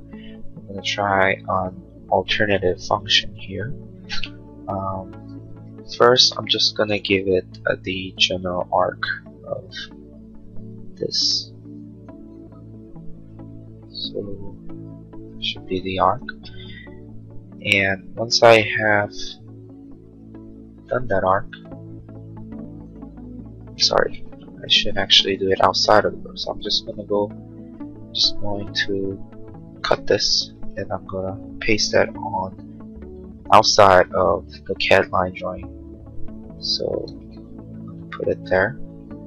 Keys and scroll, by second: 5.5 a, 16.3 space, 24.1 ctrl+z, 29.9 ctrl+x, 30.7 space, 30.8 Escape.